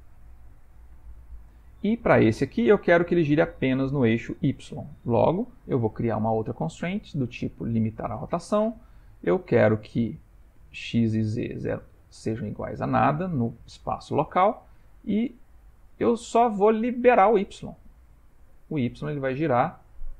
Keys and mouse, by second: 1.0 shift+middle click, 1.6 middle click, 2.4 click, 6.1 click, 10.9 click, 11.4 click, 12.6 click, 18.5 middle click, 19.1 r.